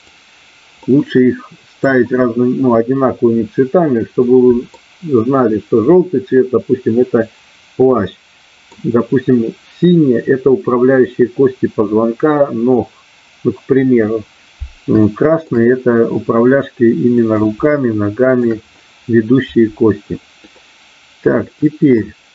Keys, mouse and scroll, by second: 0.8-1.8 middle drag, 4.3 middle click, 8.1 middle click, 15.1 shift+middle click, 16.2 middle click, 16.9 middle click, 17.7 shift+middle click, 20.4-21.9 middle drag.